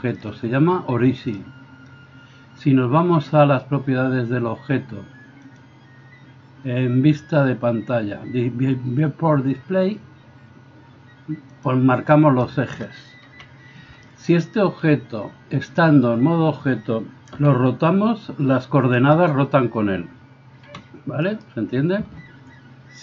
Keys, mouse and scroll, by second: 1.2-5.5 right drag, 5.5 click, 13.3 KP_1, 17.3 r, 20.7 r.